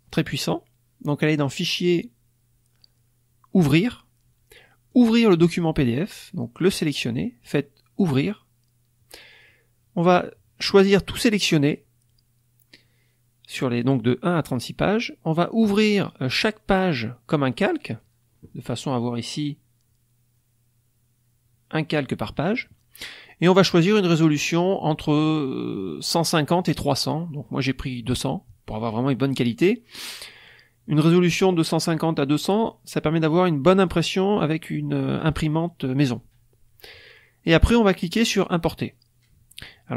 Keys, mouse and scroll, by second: 1.2 click, 3.6 click, 4.8 click, 7.9 click, 10.9 click, 24.7 click.